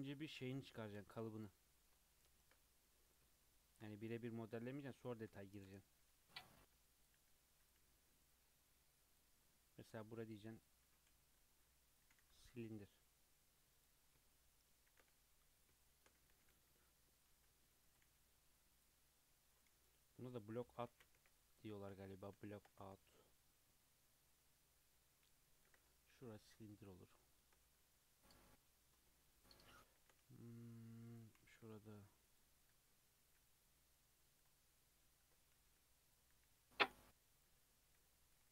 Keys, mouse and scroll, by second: 0.8-4.4 shift+middle drag, 4.4 s, 5.2 scroll up 3, 5.5-6.0 shift+middle drag, 6.0-8.7 typing, 8.4 scroll up 2, 9.4-10.0 scroll down 2, 10.1 s, 10.8 s, 12.0 g, 14.1 scroll down 1, 14.3-14.9 shift+middle drag, 14.9 shift+a, 15.8 shift+middle click, 16.3 g, 17.4 s, 18.1 g, 18.9 s, 19.7 g, 20.6 Tab, 20.9 alt+z, 21.1 1, 21.3 click, 22.0 click, 22.5 shift+middle click, 22.8 g, 26.2-26.7 scroll down 1, 26.7-27.8 shift+middle drag, 27.8 Tab, 29.1-29.9 shift+middle drag, 29.9 shift+a, 31.1 click, 31.4 g, 32.6 Tab, 33.3 click, 33.7 click, 35.2 Tab, 35.5-38.5 typing, 37.6 Tab, 38.1 click.